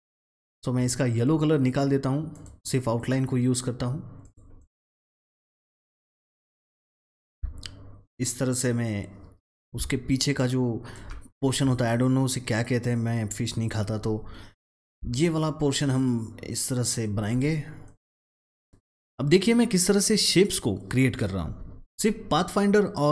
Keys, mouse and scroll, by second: 2.2-9.3 drag, 9.3 ctrl+z, 9.5-14.7 alt+drag, 14.7-17.7 alt+drag, 17.7-21.1 alt+drag.